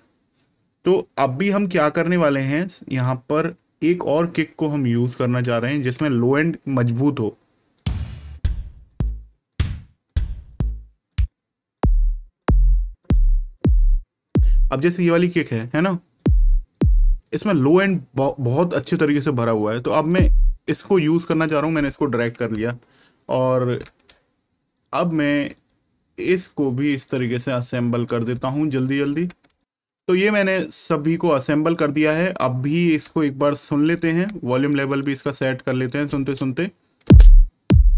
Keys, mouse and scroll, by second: 2.0 click, 3.4 scroll down 1, 5.5-7.7 scroll up 1, 7.7 click, 11.0 click, 14.2 click, 18.8 click, 22.6-23.1 ctrl+scroll up 1, 24.7-25.5 scroll up 1, 28.5-28.8 ctrl+scroll down 1, 29.5 ctrl+click, 29.6 click, 31.6 click, 33.1 ctrl+scroll up 1, 34.6 scroll up 1, 36.9 space, 37.1 click.